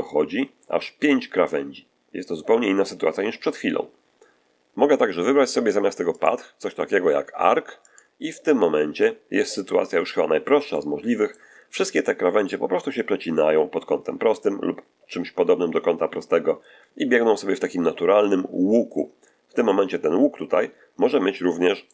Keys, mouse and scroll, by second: 3.3-4.3 scroll down 1, 6.0 click, 7.8 click, 10.6 middle click, 19.5-21.9 middle drag.